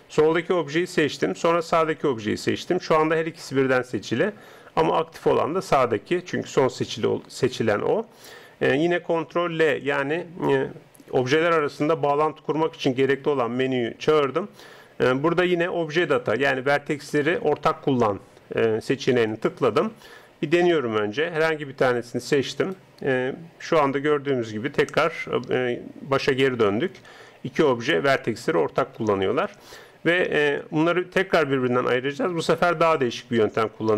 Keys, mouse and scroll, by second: 1.6 right click, 9.6 ctrl+l, 21.1 Tab, 22.6 right click, 24.5 g, 30.2 Tab.